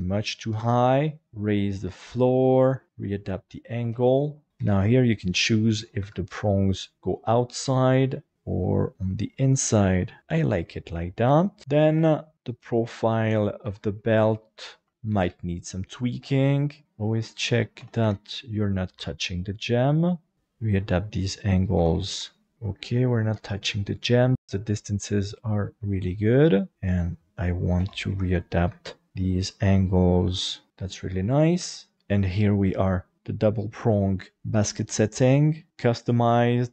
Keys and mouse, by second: 1.2 alt+a, 1.2 b, 1.5 click, 3.9 alt+z, 4.5 alt+a, 4.6 c, 5.4 click, 6.0 Escape, 6.3 middle click, 7.0 middle click, 8.0 click, 9.8 middle click, 11.3 Tab, 11.6 middle click, 11.6 right click, 12.0 KP_1, 12.3 g, 13.0 click, 13.7 Tab, 14.0 shift+middle click, 14.9 alt+z, 14.9 alt+a, 15.2 b, 15.3 click, 16.1 alt+z, 16.7 click, 16.8 shift+middle click, 17.8 alt+a, 18.0 c, 18.6 click, 18.9 Escape, 19.3 click, 20.3 alt+a, 20.3 click, 20.3 c, 21.8 alt+a, 22.1 c, 22.4 click, 22.5 alt+shift+z, 22.7-25.6 middle drag, 26.0 shift+middle click, 27.8 alt+a, 28.1 c, 28.4 click, 28.6 Escape, 29.1 g, 30.7 middle click, 31.6 Tab, 31.9 alt+a, 31.9 shift+middle click, 31.9 KP_5.